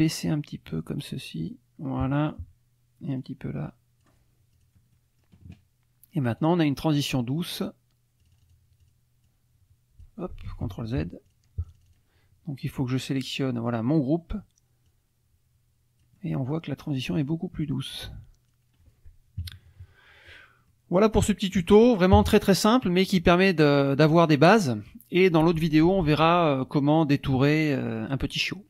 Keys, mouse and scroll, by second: 3.1 click, 3.3-4.3 scroll down 1, 4.5 click, 4.9 middle click, 6.4 click, 6.9 click, 7.4 click, 8.2 click, 8.8 click, 9.2-10.2 drag, 10.5 ctrl+z, 11.3 click, 11.6 click, 12.9 click, 14.9-16.7 drag, 16.9 middle click, 17.6-18.7 drag, 19.4 KP_Subtract, 20.7 click, 21.5 click, 22.1 KP_Subtract, 23.1 click, 23.8 click, 24.3-25.4 drag.